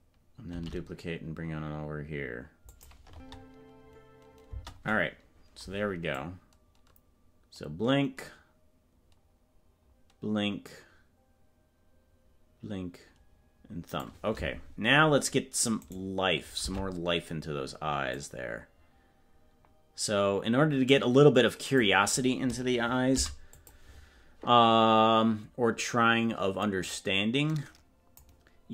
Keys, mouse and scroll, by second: 0.5 shift+d, 3.3 space, 4.7 space, 6.2-14.3 drag, 16.9 ctrl+Tab, 18.2-21.9 drag, 26.9 click.